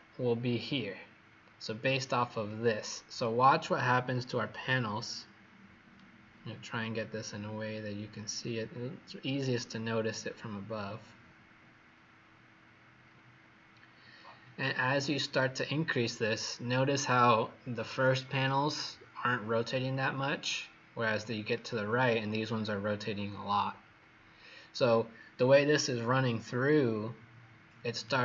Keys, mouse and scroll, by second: 2.4 click, 4.0-4.9 scroll down 2, 4.9 scroll up 1, 5.9 right click, 9.8 scroll down 3, 10.5 scroll up 1, 12.3-14.1 scroll up 1, 14.1 click, 28.0 right click.